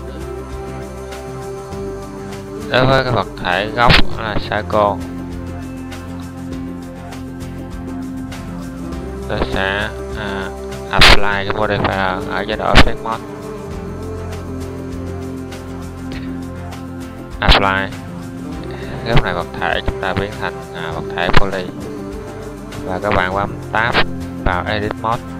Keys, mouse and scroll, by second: 24.5 Tab.